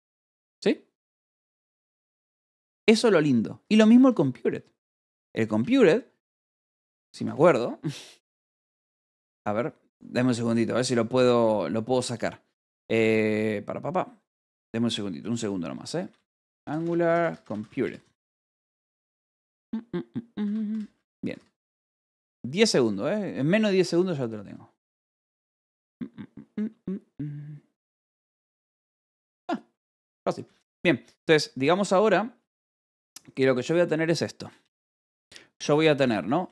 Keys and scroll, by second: 2.6 j, 4.0 a, 4.3 Return, 5.3-7.8 typing, 6.1 Tab, 9.0 space, 15.6-18.8 typing, 20.3 Escape, 20.6-22.6 typing, 31.0 alt+Tab, 31.4 a, 33.0 alt+Tab, 34.5 Return, 35.5 Escape, 35.8 a, 35.9 BackSpace.